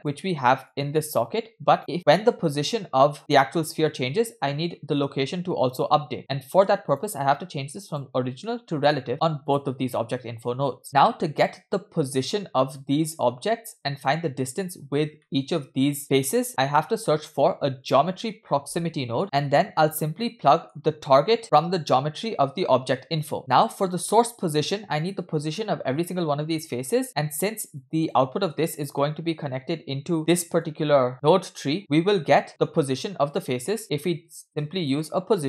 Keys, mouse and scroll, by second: 0.0 click, 0.7-1.8 drag, 4.5 middle click, 5.0 scroll up 2, 6.1 click, 6.9 click, 7.9 click, 8.5-9.0 middle drag, 9.5 click, 10.8-11.2 scroll down 2, 14.0-15.1 scroll up 3, 15.3 shift+middle drag, 16.8 shift+a, 19.2 middle click, 19.2-19.8 scroll up 2, 19.8-20.3 drag, 20.5-20.8 middle drag, 20.8-21.4 scroll up 1, 21.4 scroll up 1, 21.4-23.3 drag, 23.4 middle click, 23.4 scroll down 3, 23.5-24.6 drag, 26.7 middle click, 27.2 middle click, 27.2 scroll down 2, 27.8 click, 28.9 scroll down 1, 29.0 middle click, 30.7-31.1 drag, 31.8 middle click, 32.3-32.9 scroll up 2, 33.8 middle click, 34.1 shift+a.